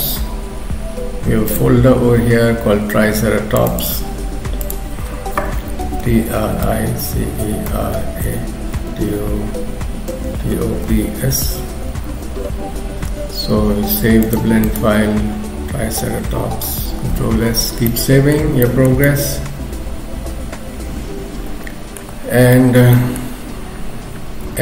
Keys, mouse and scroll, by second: 17.0 ctrl+s, 17.9 middle click, 18.6 shift+middle click, 22.2-22.6 scroll up 2, 22.6 shift+middle click, 23.0 middle click, 23.4-24.4 scroll up 1, 24.4 scroll up 1, 24.4 x.